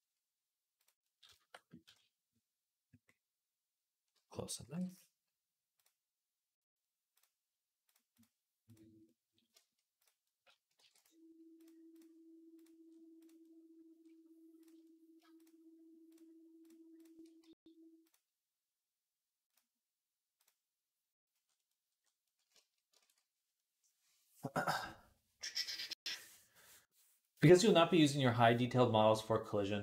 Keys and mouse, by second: 0.7-3.9 middle drag, 3.9 alt+click, 4.4 alt+d, 4.5-9.3 middle drag, 9.3 shift+click, 9.5 middle click, 9.8 click, 9.9-13.0 middle drag, 10.6 alt+d, 13.0 click, 13.2-15.2 middle drag, 15.2-16.2 shift+drag, 16.2 shift+middle click, 16.4 shift+click, 17.0 middle click, 17.8 click, 17.9-19.4 middle drag, 19.4-21.2 drag, 21.2-22.3 middle drag, 22.3 shift+click, 22.5 middle click, 22.7 ctrl+click, 22.9 ctrl+s, 22.9-29.8 middle drag.